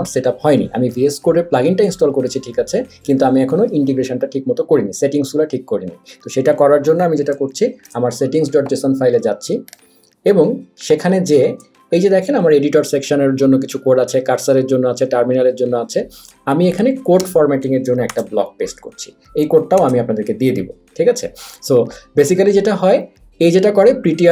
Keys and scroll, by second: 7.9 super+,, 17.2 Return, 18.1 super+v, 19.8 super+s.